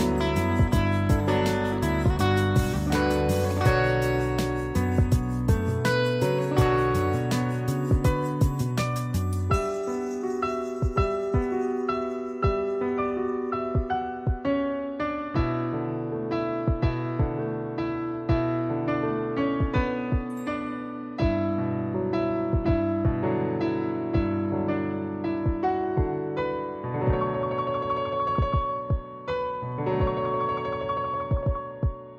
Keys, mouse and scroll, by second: 5.9 click, 8.5 click, 11.0 click, 16.5 click, 20.8 click, 28.2 click, 29.8 ctrl+shift+click, 32.1 right click.